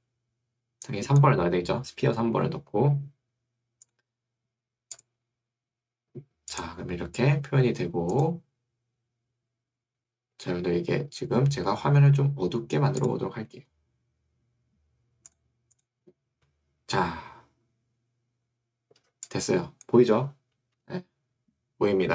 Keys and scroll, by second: 20.9 Escape.